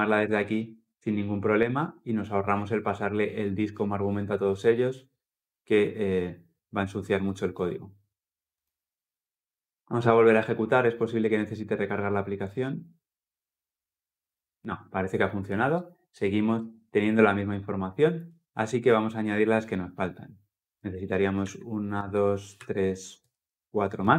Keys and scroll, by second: 8.4 ctrl+F10, 21.2 ctrl+d.